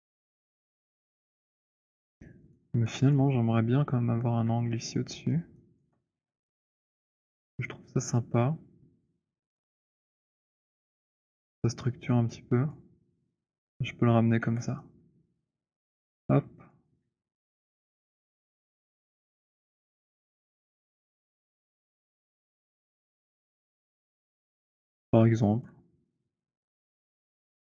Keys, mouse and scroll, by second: 0.7 alt+click, 1.4 alt+scroll, 2.6 alt+right click, 3.1 click, 3.7 middle click, 5.0 alt+middle click, 5.9 alt+right click, 5.9 w, 6.9-7.4 scroll, 7.4 right click, 10.0 shift+right click, 12.6 click, 14.5 w, 15.7 right click, 16.0-16.5 scroll, 16.8 click, 18.2 alt+click, 19.8 alt+right click, 20.5 alt+click, 25.2 alt+click, 26.6 scroll, 27.6 z.